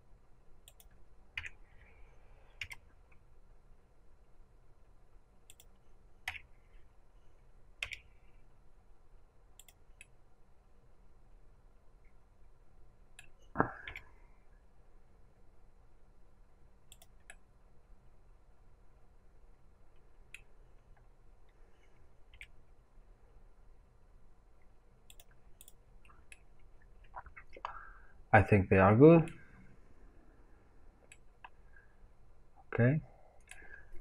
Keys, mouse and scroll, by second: 2.5 g, 4.4-6.2 drag, 7.7 g, 9.6 click, 9.9-13.8 middle drag, 13.8 g, 16.9 click, 17.2-22.2 middle drag, 20.6 scroll, 22.2-25.1 right drag, 22.2 g, 25.1 click, 26.2-34.0 middle drag, 30.0-31.0 scroll down 2.